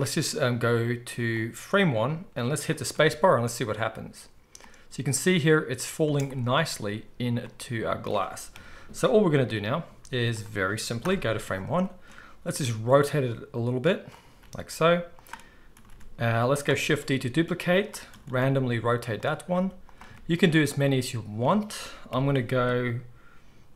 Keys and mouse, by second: 2.8 space, 6.1 space, 8.5 KP_1, 9.8 z, 11.0 shift+Left, 12.4 r, 14.4-23.7 middle drag, 14.4 g, 15.7 r, 16.9 shift+d, 18.0 r, 19.4 r, 22.0 KP_3.